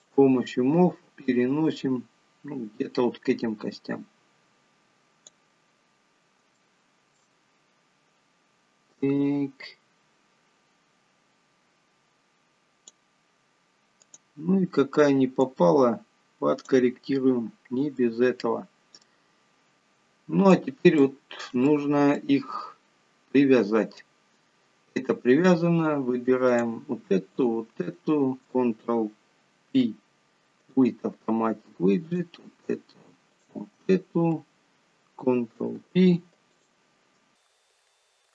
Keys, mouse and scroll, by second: 0.3 click, 1.6 click, 6.4 scroll up 2, 7.0 shift+middle click, 9.6 click, 14.4 click, 15.8 click, 18.4 middle click, 20.7 click, 21.4 shift+middle click, 22.0 middle click, 22.7-23.6 scroll up 11, 26.8 click, 27.8 shift+click, 30.1 ctrl+p, 32.5 click, 33.7 shift+click, 35.9 ctrl+p, 37.5 click, 38.0 ctrl+click.